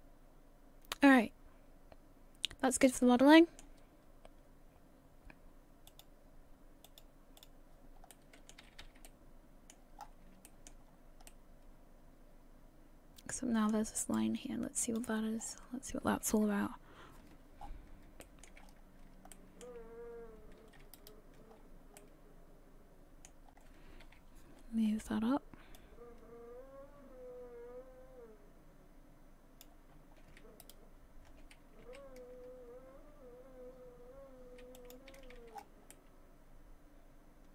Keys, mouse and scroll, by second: 5.9 shift+middle click, 5.9 click, 6.9 click, 8.1 middle click, 8.6 a, 8.8 a, 9.1 middle click, 10.0-10.4 scroll up 6, 10.5 shift+middle click, 10.9 scroll up 2, 11.3 middle click, 13.3 middle click, 13.4 shift+middle click, 14.0 right click.